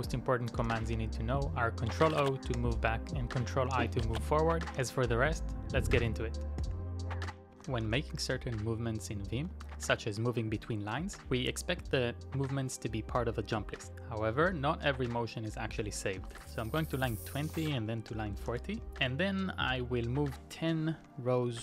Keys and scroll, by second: 0.4-1.6 typing, 2.5 ctrl+i, 3.5 i, 4.8 ctrl+o, 6.6 ctrl+i, 7.3-8.2 typing, 9.5 typing, 14.7-18.6 typing, 16.7 Return, 20.4-21.5 typing.